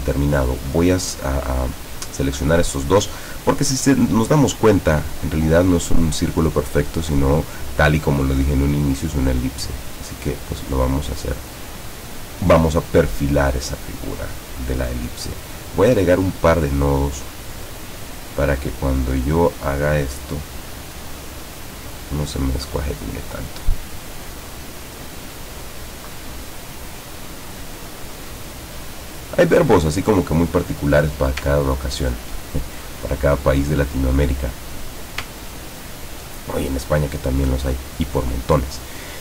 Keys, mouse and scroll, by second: 0.7-2.2 drag, 5.2-7.2 drag, 8.0-11.4 drag, 13.8 click, 15.4 click, 17.3 click, 18.5-20.1 drag, 21.0-23.5 drag, 24.6-29.0 drag, 31.7-32.0 ctrl+scroll down 2, 32.5 ctrl+click, 33.6 click, 35.5-36.0 ctrl+scroll up 2, 37.0 click, 38.2 click.